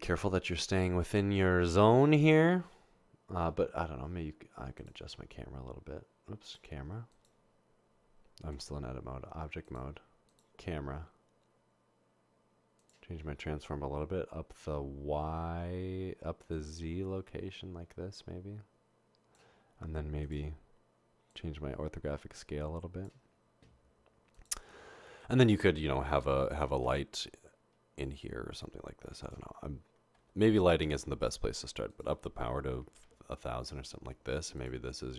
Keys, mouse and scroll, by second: 8.6 Tab, 16.6 click, 21.3-23.1 drag, 26.8 a, 29.4-30.2 typing, 31.9 click, 32.9-33.3 typing, 33.6 Return, 34.6 click.